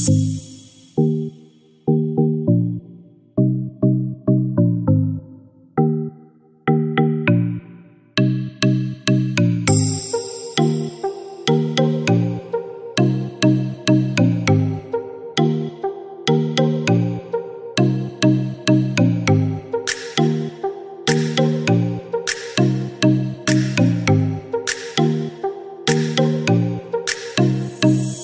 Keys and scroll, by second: 1.1-2.2 typing, 6.3-7.0 typing, 17.2-19.5 typing.